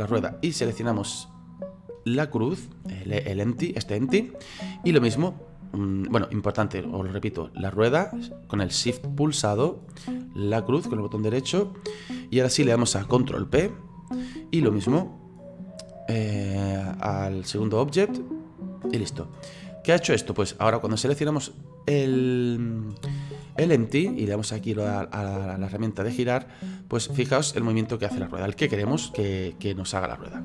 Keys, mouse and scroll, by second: 1.3 shift+right click, 6.4 right click, 7.7 right click, 10.4 shift+right click, 13.5 ctrl+p, 19.6 right click, 20.8 right click, 24.5 click, 26.3-30.4 drag.